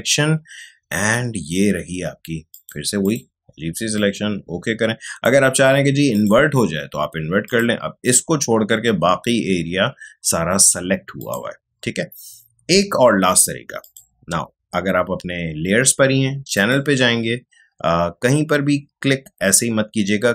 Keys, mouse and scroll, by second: 2.5-6.1 drag, 11.1 click, 13.7 click, 16.5 click, 16.5 click.